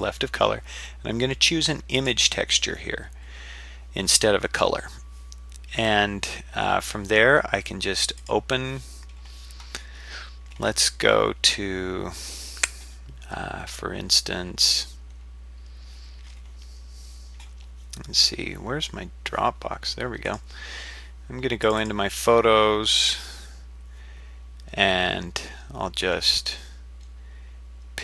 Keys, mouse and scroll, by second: 8.2 click.